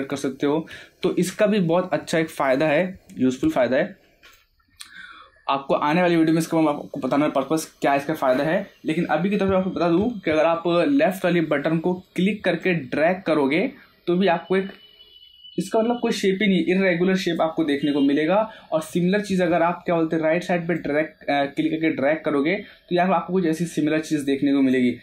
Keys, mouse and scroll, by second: 1.2-4.3 drag, 4.3-10.2 drag, 10.2 ctrl+z, 11.6 middle click, 12.0 scroll up 1, 12.6-17.8 drag, 17.8 scroll down 1, 18.4-20.7 middle drag, 20.7-25.0 drag.